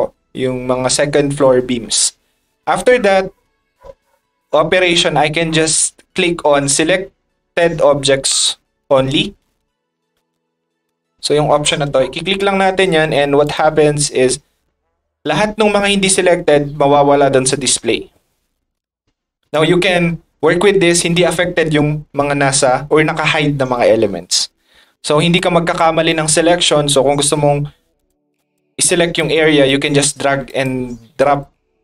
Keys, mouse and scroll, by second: 1.8 middle click, 10.8 click, 13.4 click, 18.7 middle drag, 19.5 click, 24.0 middle drag, 25.2 click, 26.1 click, 28.0 click, 28.4 click, 29.0 click, 29.6 click, 30.5 click, 31.2 click.